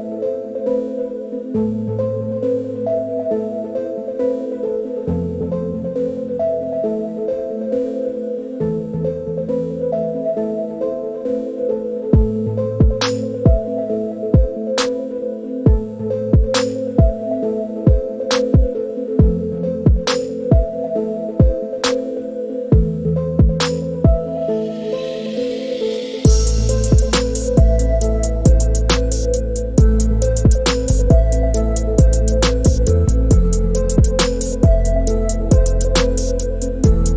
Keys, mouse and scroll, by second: 0.1 click, 1.3 shift+drag, 2.4 shift+middle click, 4.2 shift+middle click, 7.8 shift+middle drag, 13.3-13.7 drag, 16.4-20.1 drag, 22.0 Tab, 26.4 a, 27.2 alt+drag, 29.1 click, 30.8-35.0 drag.